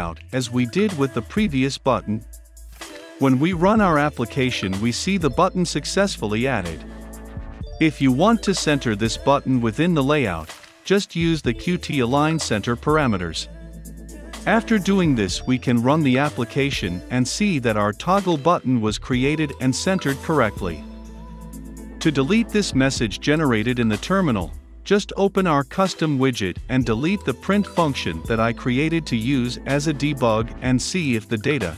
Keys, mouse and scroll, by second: 0.0 Return, 0.2 ctrl+v, 0.7 click, 1.6 t, 1.7 o, 1.9 Return, 2.4 ctrl+F5, 3.6 click, 11.0-11.7 typing, 12.4 Down, 12.6 Return, 12.7-13.3 typing, 13.3 Return, 13.6 ctrl+F5, 14.8-24.4 drag, 24.4-25.1 scroll down 1, 25.1-27.5 drag, 27.5-28.5 scroll down 1, 28.5 click, 29.2 Return, 29.8 ctrl+F5, 31.4-31.7 drag.